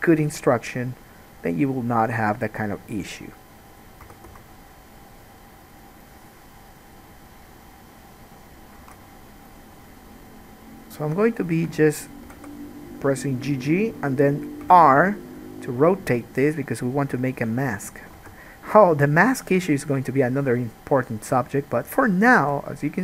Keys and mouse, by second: 4.2 s, 9.0 alt+a, 11.1 middle click, 12.5 g, 14.8 r, 18.3 alt+a, 21.9-23.0 shift+drag.